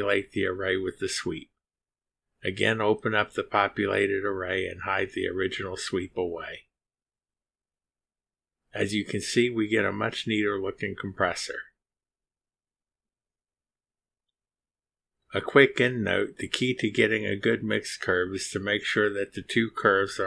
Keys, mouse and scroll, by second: 2.1 click, 5.2 click, 6.3 click, 6.8 space, 8.0-8.5 scroll down 3, 8.7-9.4 drag, 9.4-9.8 scroll up 2, 10.3 click, 12.0 click, 12.9-13.2 scroll up 2, 13.6-19.4 drag.